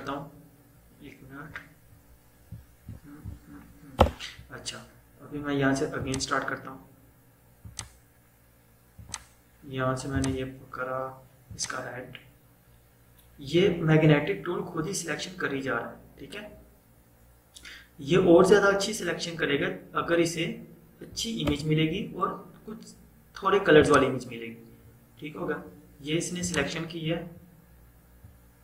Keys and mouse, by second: 0.5-4.1 typing, 6.0 click, 21.6 BackSpace, 23.9 click, 26.4 click.